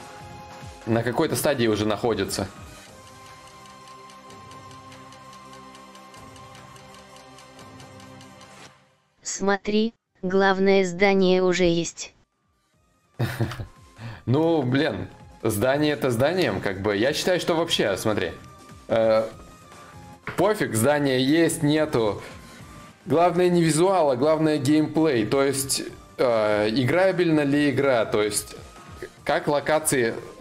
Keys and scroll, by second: 9.1 ctrl+z, 9.1 y, 10.3 z.